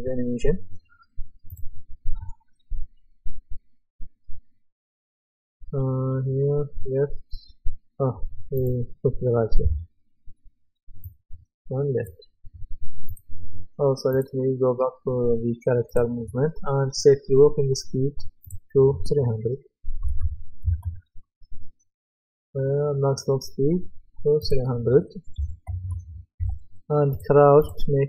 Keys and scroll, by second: 9.6 Delete, 19.8-21.3 typing, 25.4 KP_3, 26.4 Return.